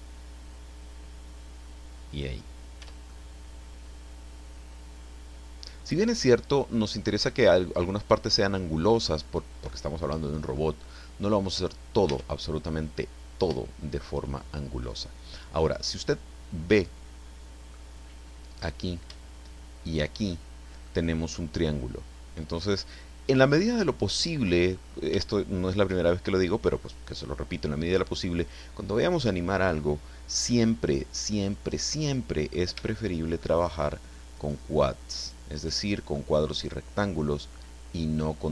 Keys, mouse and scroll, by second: 2.1 click, 2.8 Tab, 3.0-6.7 middle drag, 7.3-9.8 middle drag, 10.6-11.8 middle drag, 12.1 Tab, 14.8-17.9 middle drag, 18.5 right click, 19.8 shift+right click, 20.8 middle click, 21.4 right click, 22.4 scroll up 1, 22.8-24.6 middle drag, 24.8-25.2 scroll up 1, 25.2-27.0 shift+middle drag, 30.3-32.7 middle drag, 32.8 shift+middle click, 34.4 shift+right click, 35.2 shift+right click, 35.6-36.0 shift+scroll down 1, 36.0 shift+scroll up 1, 36.1-38.5 shift+middle drag.